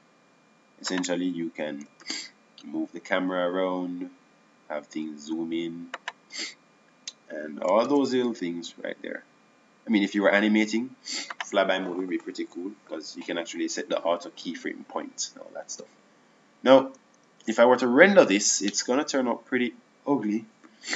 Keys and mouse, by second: 5.2 shift+f, 9.9 shift+f.